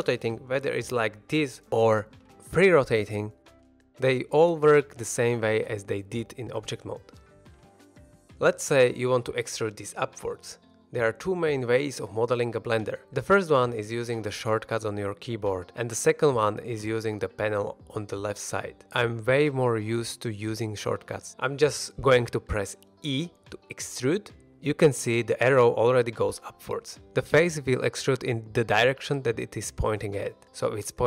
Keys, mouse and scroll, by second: 0.0 right click, 0.3 s, 0.8 right click, 1.0 r, 2.9 r, 5.1 right click, 22.0 middle click, 23.0 e.